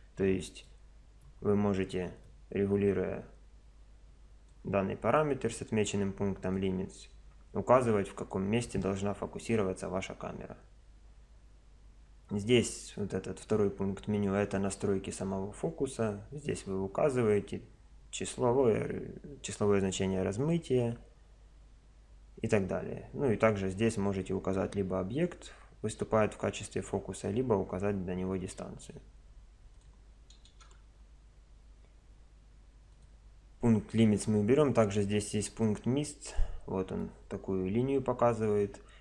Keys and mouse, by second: 0.0 Escape, 0.7 click, 0.9-4.5 middle drag, 6.6 click, 14.2 click, 20.4 click, 29.8 click, 32.9-35.6 drag, 35.6-39.0 middle drag.